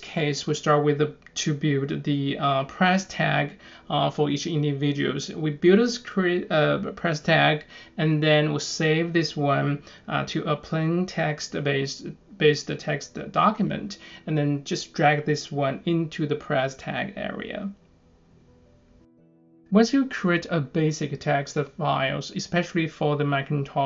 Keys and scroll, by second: 1.1 9, 1.5 Return, 2.5-4.0 typing, 4.5 Return, 5.2-6.7 typing, 9.0 super+c, 10.2 Return, 10.5 super+v, 10.7 Return, 11.1 super+v.